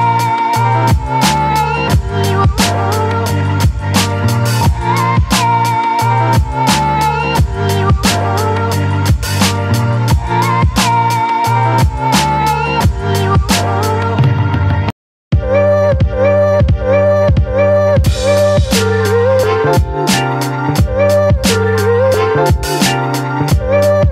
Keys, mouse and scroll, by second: 2.0-11.1 drag, 13.7 click, 15.7-24.1 drag.